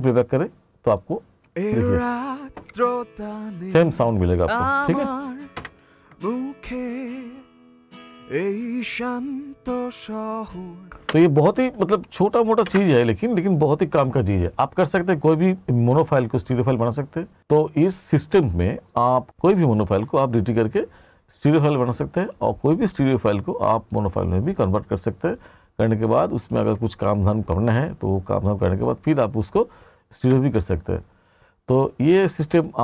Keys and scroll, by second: 1.5 space, 5.6 ctrl+=, 11.0 space.